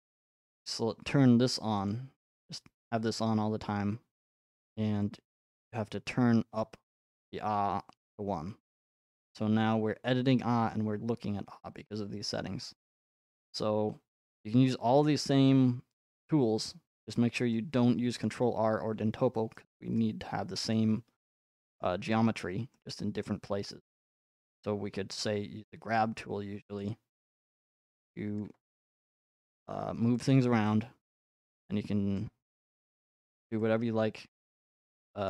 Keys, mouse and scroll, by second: 2.0-4.0 drag, 6.6-8.7 drag, 15.5-17.6 middle drag, 18.2-21.8 middle drag, 22.4 shift+middle click, 23.2 middle click, 25.1 g, 26.4 f, 26.9 click, 28.4 click, 29.6 click, 30.5 click, 31.0 click, 32.2 click, 32.5 middle click, 32.7 middle click, 33.0-33.6 scroll.